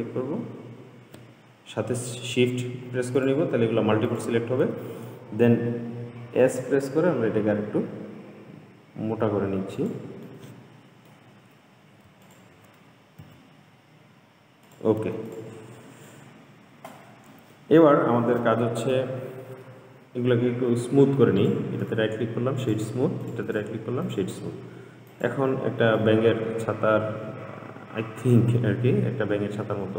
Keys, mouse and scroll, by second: 3.4 alt+shift+click, 4.4 alt+shift+click, 6.5 s, 10.5-12.5 middle drag, 12.5 alt+click, 13.4 s, 15.5 click, 15.9-16.3 scroll down 2, 16.3-17.4 middle drag, 17.4-18.0 scroll up 2, 18.0-19.2 scroll down 1, 19.2 Tab, 21.6 click, 22.1-23.5 right drag, 23.5 click, 24.4-25.3 right drag, 25.3 click, 25.8-26.3 scroll down 2, 26.3-29.3 middle drag.